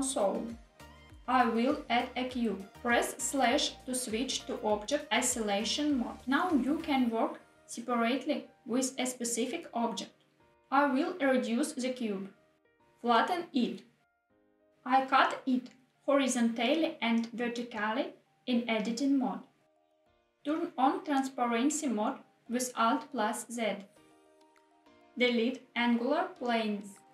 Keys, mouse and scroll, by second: 1.7 shift+a, 3.7 /, 5.2-5.7 scroll down 3, 6.0 middle click, 10.8 s, 12.6 click, 12.7 s, 12.9 y, 14.5 click, 14.8 Tab, 16.2 ctrl+r, 17.2 click, 17.3 ctrl+r, 18.0 click, 18.2 s, 18.2 z, 19.8 click, 21.6 KP_1, 23.9 alt+z, 25.3 KP_1, 25.3 click, 25.9 shift+click.